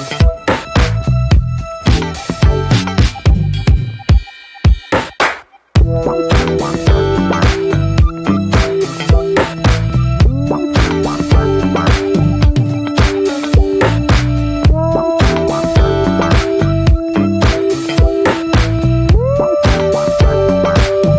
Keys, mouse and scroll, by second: 1.1-1.5 scroll down 2, 1.5-2.8 middle drag, 2.8-3.2 scroll up 3, 3.6 middle click, 4.0 shift+scroll up 1, 4.7-10.7 shift+middle drag, 10.7 click, 13.1 alt+middle click, 15.1-17.4 drag, 17.4 ctrl+z.